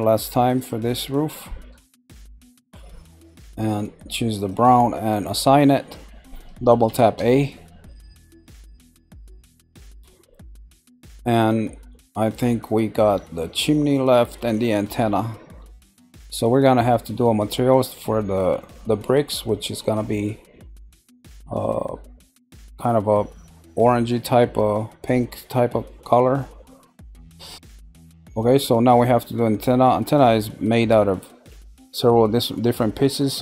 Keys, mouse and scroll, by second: 0.5 shift+click, 1.3 middle click, 4.3 click, 5.2 click, 6.8 a, 7.0 a, 8.2-9.3 middle drag, 9.3-9.9 scroll down 3, 9.9-14.2 middle drag, 14.9 middle click, 15.9 scroll up 1, 28.3 middle click, 29.0-32.0 scroll up 1.